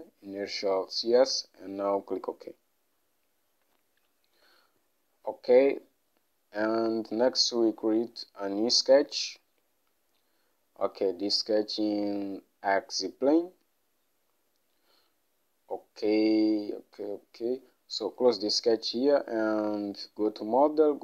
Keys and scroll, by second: 4.5 Home.